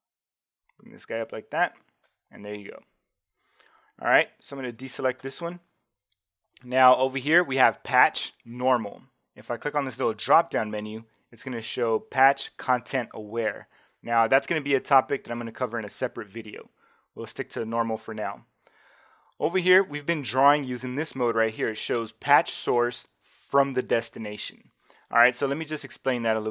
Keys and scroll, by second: 4.8 super+d.